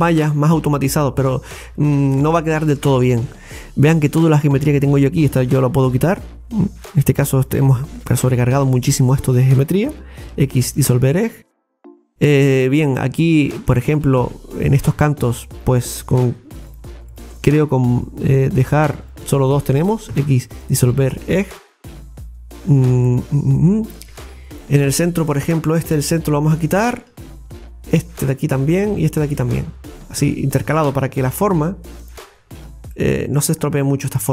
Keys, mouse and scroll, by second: 1.2-1.5 scroll down 3, 2.0-2.6 scroll up 2, 2.8 middle click, 4.9 right click, 5.8 alt+shift+right click, 5.9 alt+shift+right click, 6.8 alt+shift+right click, 7.4 alt+shift+right click, 8.0 alt+shift+right click, 8.7 alt+shift+right click, 9.2 alt+shift+right click, 10.3 x, 11.6-14.0 middle drag, 14.0-14.3 scroll up 1, 15.6 right click, 16.7 shift+right click, 17.1 alt+shift+right click, 17.4 alt+shift+right click, 18.4 alt+shift+right click, 19.1 alt+shift+right click, 21.0 scroll down 2, 21.4-26.4 middle drag, 26.8 alt+shift+right click, 26.9 alt+shift+right click, 28.6 alt+shift+right click, 30.4 alt+shift+right click, 31.4 x, 32.6-32.9 scroll down 3, 32.9 middle click, 33.6-34.3 scroll down 3.